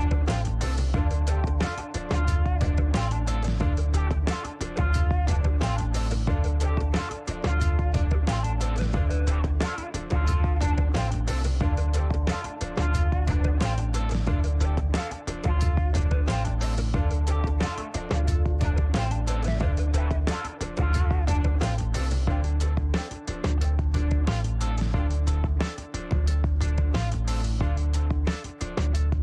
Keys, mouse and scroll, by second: 1.0 click, 2.0 click, 4.3 click, 6.0 click, 7.5 right click, 8.5 click, 10.4 click, 13.8 click, 15.1 click, 16.9 click, 19.8 1, 23.2 click, 25.4 click, 26.6 middle click, 27.6 shift+right click, 28.7-29.2 scroll up 3.